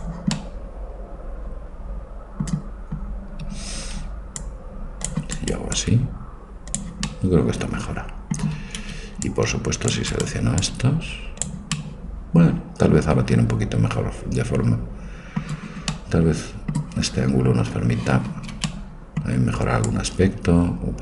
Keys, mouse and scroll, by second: 0.4 middle click, 3.5 a, 3.8 c, 5.8 click, 6.7 click, 7.1-8.2 middle drag, 8.6 a, 8.8 c, 10.6 click, 13.5 middle click, 15.9-17.9 middle drag, 18.3 a, 18.5 c.